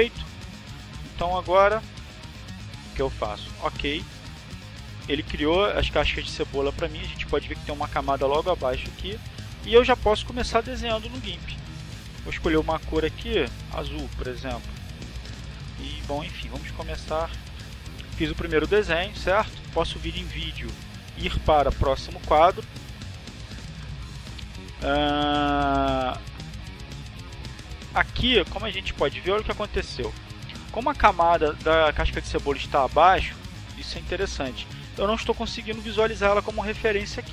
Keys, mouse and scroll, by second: 2.2 click, 2.6 click, 3.4 click, 11.8 click, 13.0 click, 13.7 click, 14.7 click, 16.9 click, 19.4 click, 21.8 click, 27.4 click, 35.3 click.